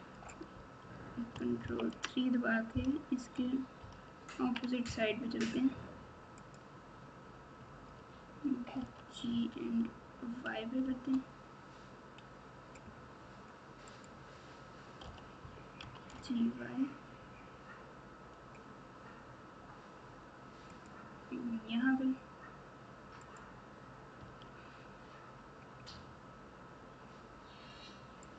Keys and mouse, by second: 1.6 ctrl+KP_3, 3.7 ctrl+KP_6, 4.2 ctrl+KP_6, 6.3 click, 8.7 g, 15.0 o, 15.8 g, 23.2 click, 24.1 g.